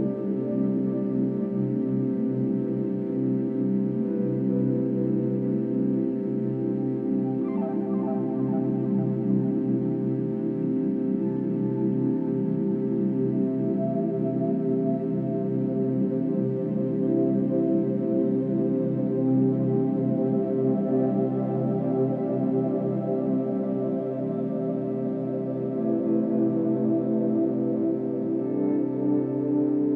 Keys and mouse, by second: 0.5-1.8 alt+drag, 2.5-3.9 drag, 4.0-4.8 drag, 4.9 g, 9.9 Escape, 11.0-11.6 drag, 12.1-15.0 ctrl+alt+drag, 15.4 g, 19.4 Escape, 20.0-21.0 alt+drag, 20.8 1, 21.8-22.8 drag, 22.8 g, 24.3-25.4 drag, 25.6 r, 26.0 x, 27.3-28.2 drag, 28.2 r, 28.5 y, 29.7-29.9 drag.